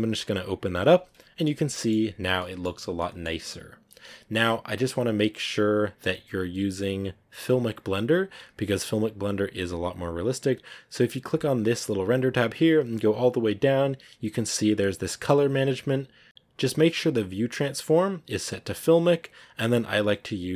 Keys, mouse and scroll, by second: 0.0 click, 1.7 middle click, 2.1 scroll down 1, 2.3 middle click, 2.6 scroll up 2, 2.9 middle click, 3.5 scroll down 1, 5.0 scroll down 1, 5.0-10.1 drag, 10.1 scroll down 8, 11.8-20.5 drag.